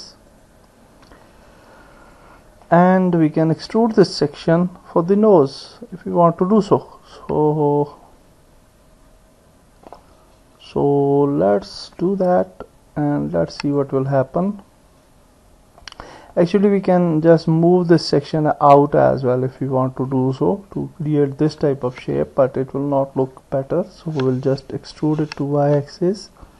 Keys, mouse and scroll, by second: 0.3 ctrl+click, 2.0 ctrl+click, 2.6 middle click, 6.3-7.3 middle drag, 7.3 click, 7.9 middle click, 13.6 click, 15.8 middle click, 17.4-19.7 drag, 20.1 middle click, 20.2-21.5 drag, 23.1 ctrl+z, 23.6 middle click, 23.7 click, 25.1 e.